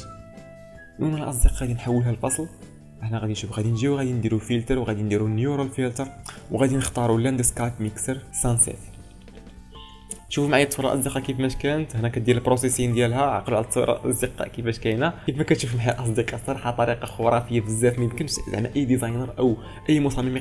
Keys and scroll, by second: 6.2 ctrl+space.